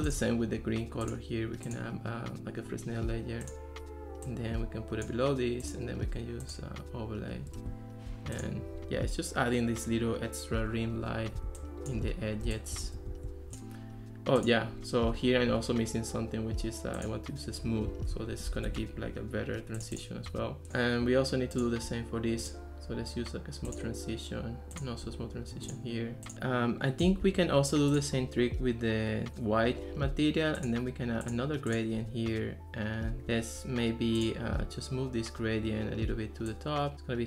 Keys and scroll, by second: 11.6 ctrl+s, 13.0 ctrl+x, 18.5 Escape.